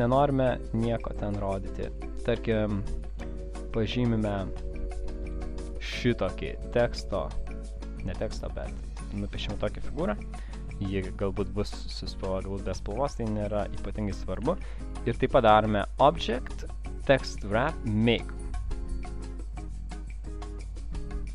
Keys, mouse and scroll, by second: 3.3 click, 5.5 click, 10.5 v, 11.2 click, 15.7 click.